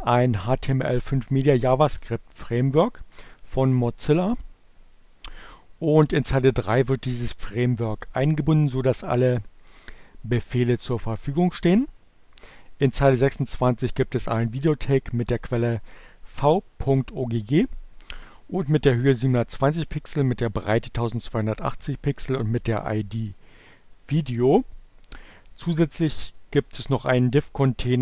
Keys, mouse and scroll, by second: 6.4 click, 12.2 click, 22.2-24.2 drag, 27.2-28.0 drag.